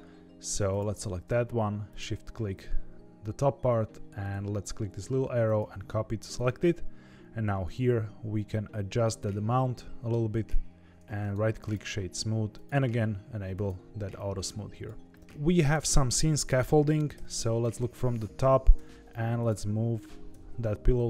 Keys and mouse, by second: 0.6 click, 4.1-5.5 drag, 6.3 click, 7.7-10.9 shift+drag, 11.1 right click, 12.5 drag, 13.5 click, 14.2 click, 15.6 click, 17.1 KP_7, 18.7 g, 20.2 r.